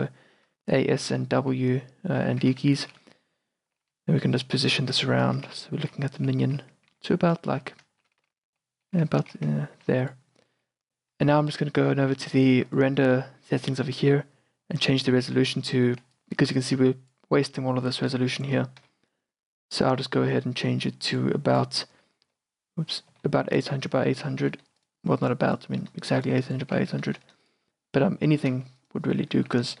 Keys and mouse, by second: 12.8-15.2 drag, 16.1-17.7 d, 16.3-18.6 drag, 18.6 d, 18.9 n, 21.2-28.5 drag, 22.1 n, 22.4 n, 23.2 n, 27.2 KP_0, 27.4 KP_0, 28.9-29.8 drag.